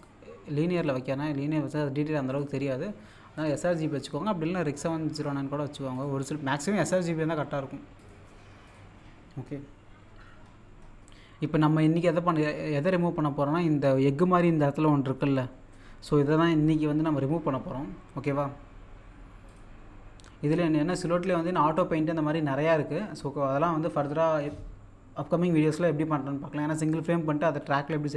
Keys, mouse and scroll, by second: 2.3 click, 2.3 typing, 5.2 click, 8.0 click, 10.4 scroll up 1, 12.9-13.3 scroll up 1, 15.6-16.3 scroll up 1, 19.5 click.